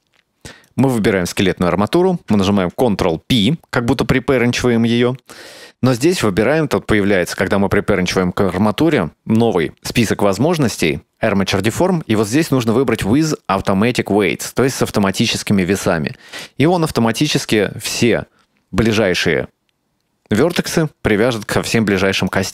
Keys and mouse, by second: 0.8 shift+right click, 4.5 ctrl+p, 22.4 right click.